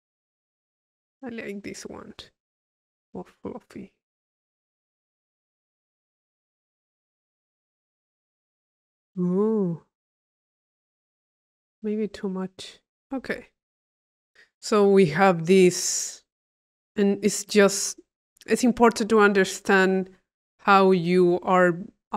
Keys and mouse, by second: 3.9-7.2 drag, 12.1-13.2 drag, 13.6 click, 14.1 click, 14.6-16.0 drag, 16.5 click, 16.8 middle click, 17.5 click, 18.2-19.3 middle drag, 19.3 click, 20.0 click.